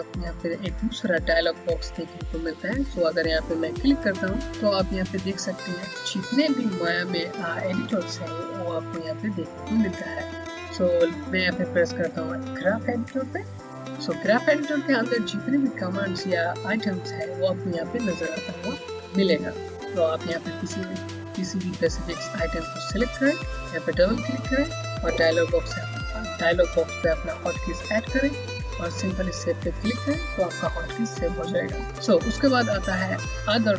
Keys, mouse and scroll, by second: 3.3 click, 4.7-5.2 scroll up 1, 5.2-7.0 scroll down 1, 8.5-11.7 scroll up 1, 13.3 click, 14.9-17.1 scroll down 1, 17.8 scroll down 1, 22.1 click, 31.9 click.